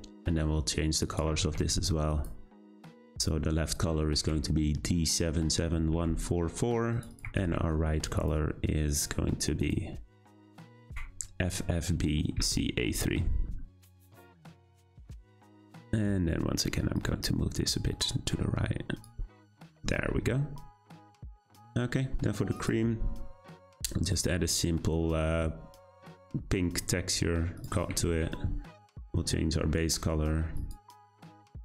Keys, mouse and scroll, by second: 8.9 click, 15.2 drag, 17.0-22.6 drag, 26.2-31.6 drag.